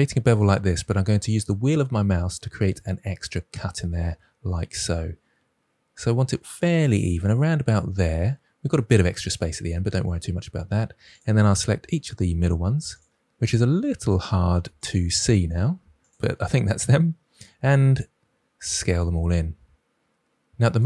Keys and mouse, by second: 18.7 s.